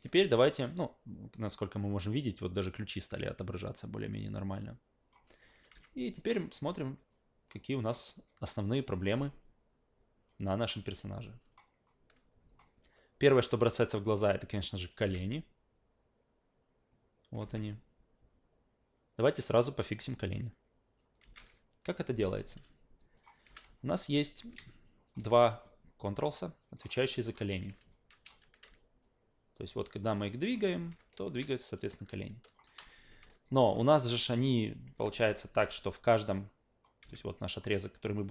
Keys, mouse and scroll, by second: 0.3 alt+click, 2.1-5.1 drag, 5.4 click, 5.7 alt+v, 6.1 alt+right click, 6.3 alt+middle click, 7.1 alt+click, 8.1 alt+right click, 8.5 alt+middle click, 9.0 alt+click, 11.6 alt+middle drag, 12.6-13.5 alt+middle drag, 15.4-17.3 drag, 17.4 alt+v, 21.2 alt+v, 23.1 click, 23.4 f, 23.9 alt+right click, 25.1 shift+click, 25.4 alt+right click, 25.6 alt+click, 26.6 alt+right click, 26.8 alt+middle click, 27.1 alt+click, 27.5 w, 27.9 alt+click, 29.0-30.5 drag, 30.7 ctrl+z, 31.1 alt+middle drag, 31.4-32.5 alt+drag, 33.3 alt+right click, 33.5 alt+middle drag, 35.2 alt+g, 36.4-36.8 drag, 37.0 f, 37.5 click.